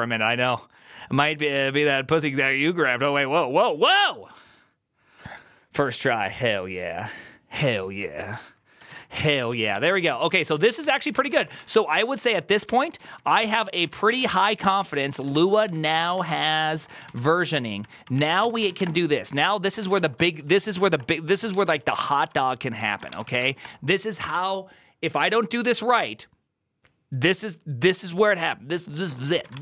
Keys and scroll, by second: 9.3 alt+{, 9.3 ctrl+c, 9.4-21.4 typing, 10.3 ctrl+u, 10.4 ctrl+u, 10.7 ctrl+c, 11.6 ctrl+d, 11.8 ctrl+d, 21.2 ctrl+a, 21.6 ctrl+c, 21.8 Up, 22.2 ctrl+c, 22.4-23.7 typing, 29.1 ctrl+a, 29.3-29.6 typing, 29.4 ctrl+c, 29.5 ctrl+c.